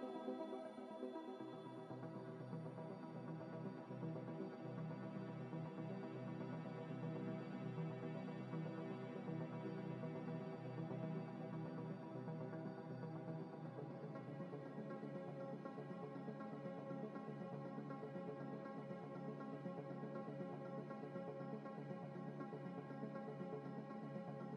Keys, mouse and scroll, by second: 0.5-1.3 ctrl+z, 1.4 ctrl+z, 1.5 ctrl+z, 1.7 ctrl+z, 1.8 scroll down 1, 2.2 Tab, 2.4 Tab, 3.0 Tab, 3.0 middle click, 4.3 scroll down 1, 4.5 scroll up 1, 4.8 shift+a, 6.4 Tab, 6.6 ctrl+s, 7.1 shift+a, 9.0 scroll down 1, 9.5-11.4 typing, 10.3 KP_Enter, 10.3 Return, 10.7 Return, 12.3 scroll up 1, 13.1-17.2 typing, 19.1 scroll up 1, 19.1 z, 19.4 scroll down 1, 21.7-23.7 typing.